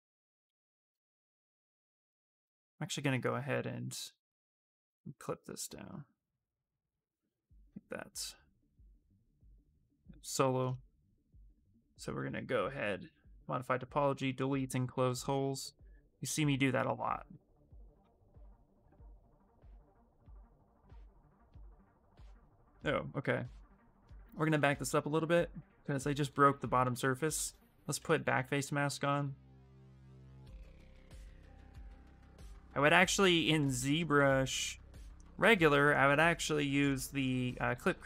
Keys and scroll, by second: 5.5 ctrl+shift+space, 16.0 s, 23.7 ctrl+z, 23.9 ctrl+z, 24.2 ctrl+z, 24.5 ctrl+z, 25.6 ctrl+z, 26.0 ctrl+z, 26.4 ctrl+z, 26.8 ctrl+z, 27.2 ctrl+z, 27.6 ctrl+z, 27.8 ctrl+z, 28.0 ctrl+z, 28.3 ctrl+z, 28.7 ctrl+z, 29.0 ctrl+z, 29.3 ctrl+z, 29.5 ctrl+z, 29.9 ctrl+z, 30.1 ctrl+z, 30.6 ctrl+z, 30.9 ctrl+z, 31.1 ctrl+z, 31.4 ctrl+z, 31.7 ctrl+z, 32.0 ctrl+z, 32.1 ctrl+z, 32.3 ctrl+z, 32.7 ctrl+z, 32.8 ctrl+z, 33.0 ctrl+z, 33.2 ctrl+z, 33.3 ctrl+z, 33.5 ctrl+z, 33.7 ctrl+z, 33.9 ctrl+z, 34.4 ctrl+z.